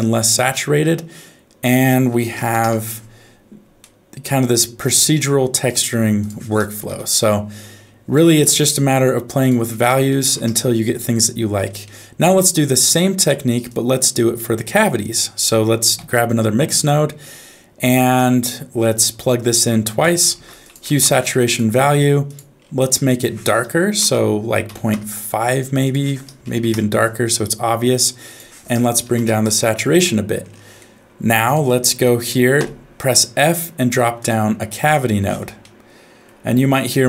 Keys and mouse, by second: 0.2 middle click, 1.7 click, 3.8 middle click, 6.2 click, 8.1 middle click, 9.4-10.4 drag, 11.8 middle click, 12.8 click, 13.8 click, 14.4 middle click, 15.1 click, 16.0 shift+d, 19.0-20.1 drag, 20.4 shift+a, 23.1-24.9 drag, 25.9 click, 28.3-29.4 drag, 30.9 middle click, 31.4 click, 32.6 f, 35.6 middle click.